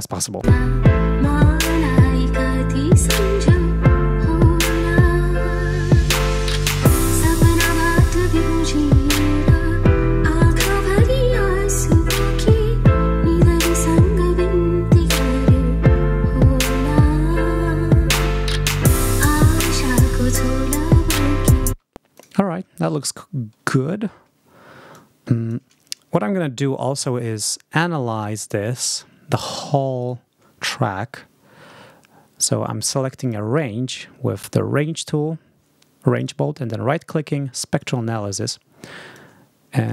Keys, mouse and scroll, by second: 0.6 space, 21.6 space, 22.0 click, 22.9-23.3 ctrl+scroll down 2, 24.8 click, 27.3 r, 27.8-29.5 drag, 29.9 right click, 33.1 click, 36.1 right click, 37.7 click, 39.0 click.